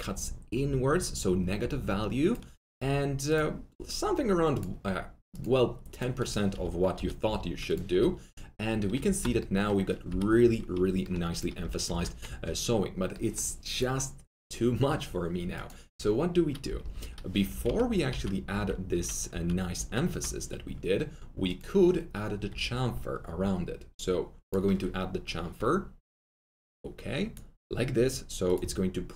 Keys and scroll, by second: 6.4 F3, 7.2 F4, 9.0 alt+g, 10.7 F3, 11.6 F3, 11.7 F3, 11.8 F4, 16.6-17.4 typing, 17.6 ctrl+z, 22.4 ctrl+z.